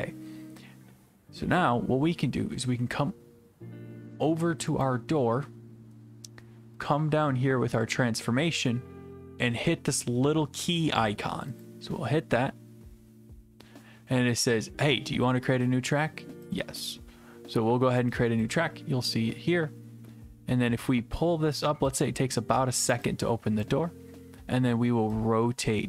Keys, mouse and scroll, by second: 11.6 click, 16.6 click, 23.6 click.